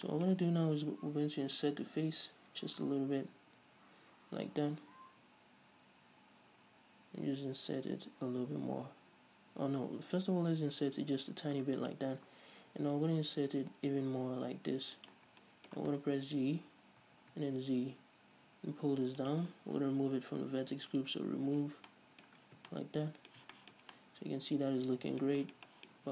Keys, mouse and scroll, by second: 12.1 shift+click, 15.3 shift+drag, 15.6-19.5 middle drag, 16.4 g, 19.5 shift+click, 21.2 click, 22.1-26.1 middle drag, 22.6 scroll down 1, 22.8 Tab.